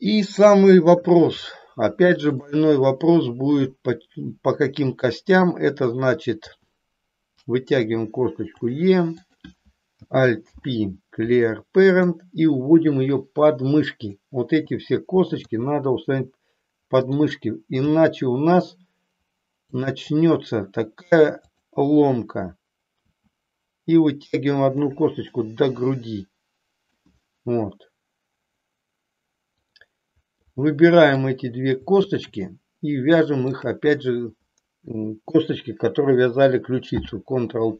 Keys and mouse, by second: 0.5 KP_3, 1.6 shift+middle click, 6.3 e, 9.2 click, 10.4 alt+p, 12.8-14.1 drag, 15.6 r, 17.1 click, 17.8 g, 21.4 click, 22.9 e, 25.3-26.9 middle drag, 29.4 click, 30.4 middle click, 33.6 shift+click, 36.8 ctrl+p.